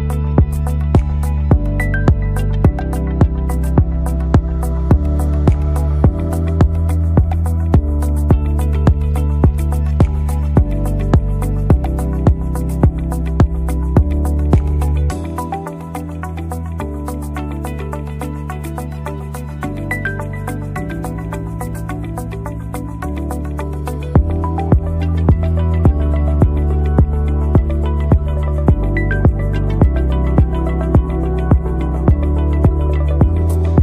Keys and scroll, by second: 8.0 Right, 8.2 Right, 8.7 Down, 9.0 Down, 24.3 Left, 24.9 Left, 25.1 Left, 27.2 Right, 28.0 Right, 28.6 Left, 31.5 ctrl+e, 31.7 ctrl+e, 32.1 ctrl+e.